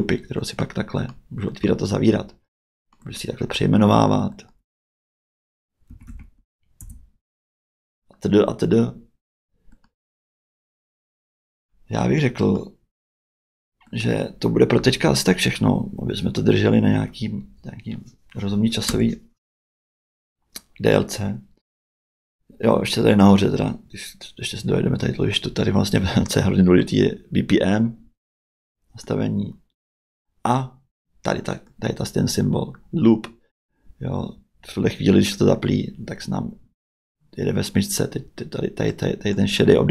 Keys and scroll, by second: 5.6-6.7 typing, 6.8 Return, 18.9 space.